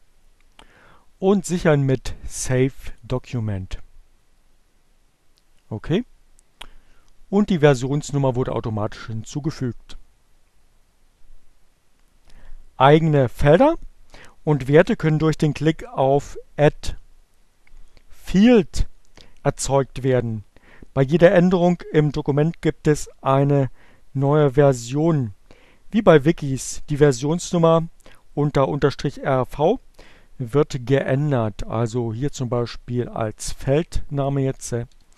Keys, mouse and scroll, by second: 1.2 click, 17.2 click, 32.0 shift+n, 34.2-35.1 typing.